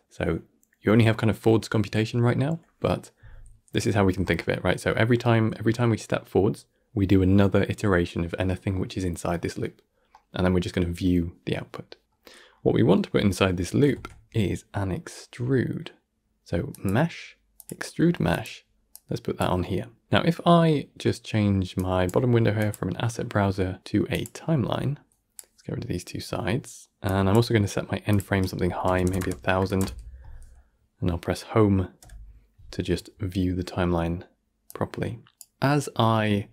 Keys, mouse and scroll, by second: 3.8-4.1 scroll down 1, 4.1-7.1 shift+middle drag, 10.0-12.1 middle drag, 12.1-12.4 scroll down 1, 12.4-13.8 middle drag, 13.8 shift+a, 29.1 KP_0, 31.9 Home, 34.5-36.2 drag, 36.2-36.5 alt+scroll down 1.